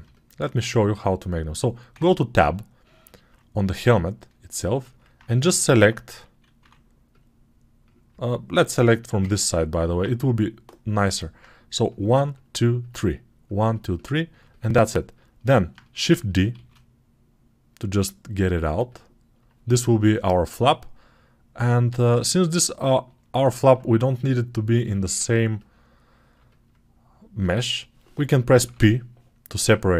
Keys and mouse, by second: 1.8 Tab, 7.0-11.8 middle drag, 11.8 click, 12.0 ctrl+middle click, 12.2 ctrl+click, 13.3 ctrl+middle click, 13.8 ctrl+click, 14.2-29.9 alt+middle drag, 16.4 shift+d, 28.5 p.